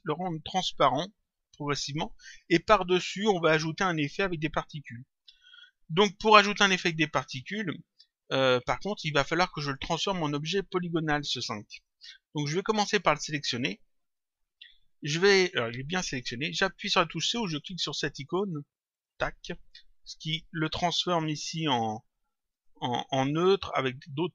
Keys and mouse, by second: 8.2 click, 10.2 click, 13.0 click, 18.8 click, 21.1 click, 22.4 click, 23.9 click.